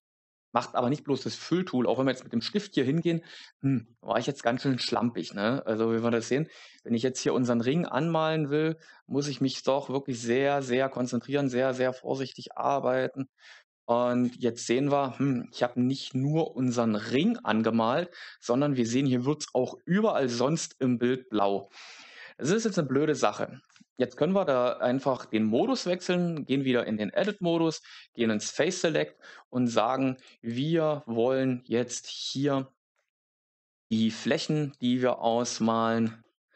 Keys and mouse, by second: 6.6 click, 23.6 Tab, 25.6 shift+middle click, 27.1 3, 28.6 alt+right click, 30.1 shift+right click, 32.0 alt+shift+right click, 33.5 shift+right click, 34.2 shift+right click, 34.6 shift+right click.